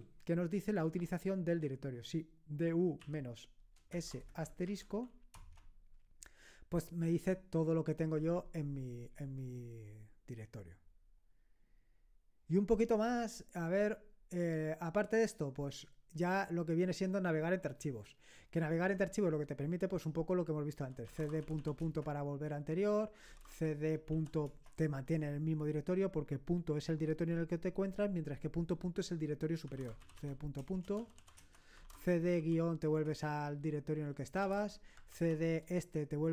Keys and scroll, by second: 0.0-0.7 typing, 3.0-4.6 typing, 5.4 Return, 20.8-24.5 typing, 29.4-32.8 typing, 31.4 Return, 34.1-35.1 typing.